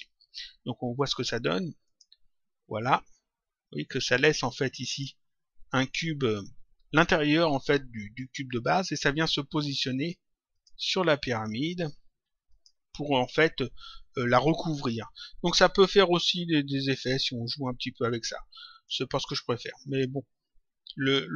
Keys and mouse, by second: 0.9 click, 4.8 click, 10.4 click, 12.4 click, 16.7 click, 18.6 click, 19.7 click, 20.9 click.